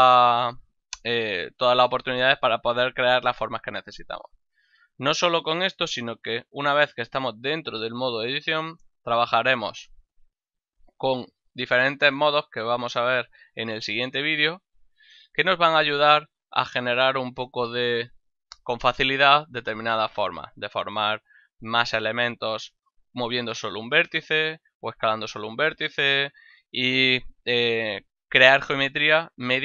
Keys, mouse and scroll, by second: 1.5 ctrl+middle click, 1.9 shift+middle click, 9.8 click, 17.0 right click.